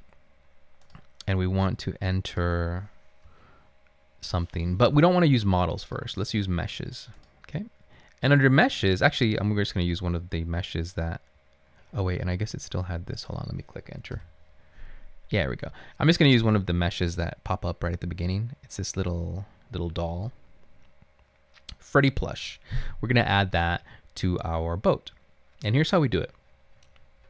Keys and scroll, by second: 3.4 BackSpace, 3.9 BackSpace, 14.3 Return.